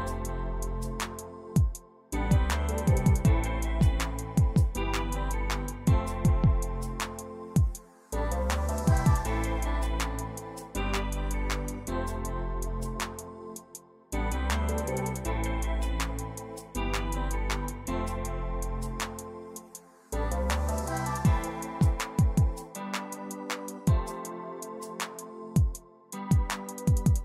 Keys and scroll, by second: 3.1 1, 3.5 Return, 3.5 2, 5.9 z, 7.1 p, 8.6 r, 10.4 d, 11.3 Return, 11.3 1, 13.4-14.1 typing, 24.6 1, 24.8 Tab, 24.9 4, 26.6 e.